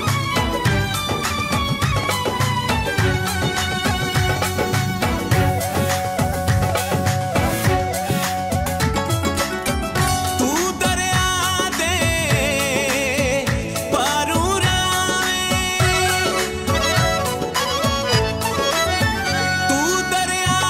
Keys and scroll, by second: 3.9 i, 6.3-9.5 typing, 11.8-15.3 typing, 17.3 BackSpace, 18.6-20.2 typing.